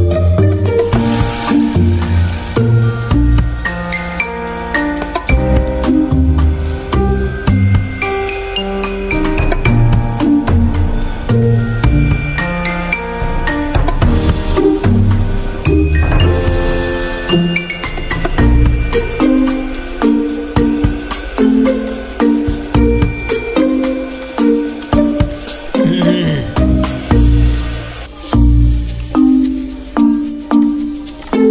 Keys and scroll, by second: 7.8 z, 10.5 g, 26.3 z, 29.7 v.